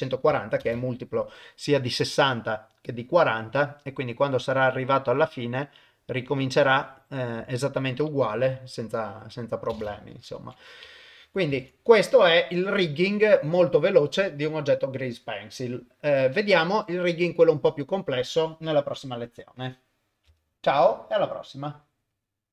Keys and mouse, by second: 9.7 shift+space, 10.4 shift+Left, 11.5 ctrl+Tab.